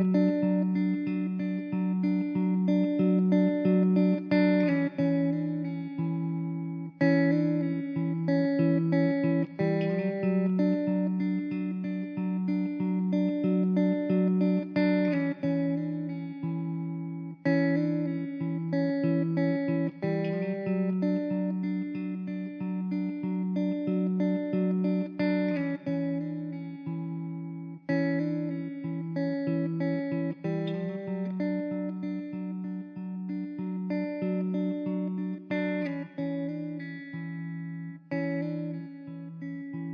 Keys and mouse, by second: 0.6 middle click, 6.5 alt+w, 9.3 middle click, 15.3 e, 18.1 w, 20.7 alt+w, 22.1 middle click, 26.4 alt+w, 27.3 shift+z, 28.7 z, 29.4 alt+middle click, 32.3 alt+q, 32.8 middle click, 34.6 m.